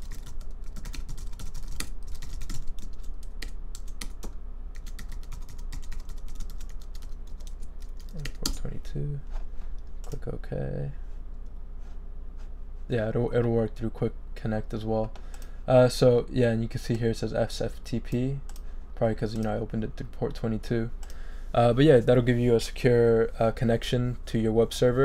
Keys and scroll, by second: 0.0-3.4 typing, 4.0 shift+Tab, 4.9 Tab, 8.1 2, 8.4 Return.